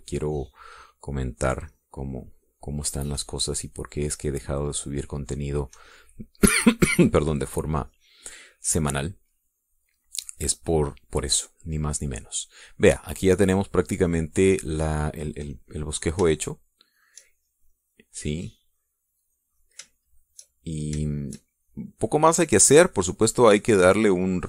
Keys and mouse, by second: 5.9 middle click, 6.5 middle click, 7.5 click, 8.7-11.3 drag, 11.6 middle click, 12.5-15.6 drag, 16.8 click, 18.3 shift+click, 18.8-21.2 shift+drag, 21.5 shift+click, 22.3 shift+click, 22.9 shift+click, 24.1 shift+click.